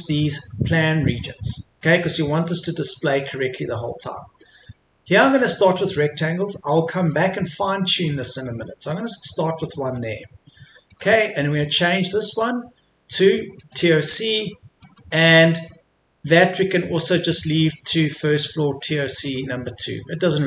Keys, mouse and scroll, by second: 2.0 middle click, 5.3-14.7 drag.